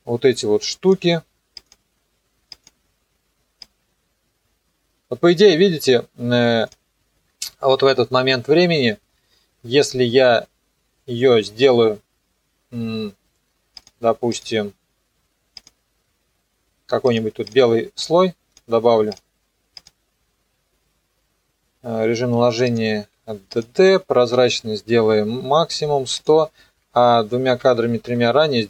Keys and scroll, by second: 7.3 Page_Down, 8.2 Page_Up, 24.3 t, 27.0 Page_Up.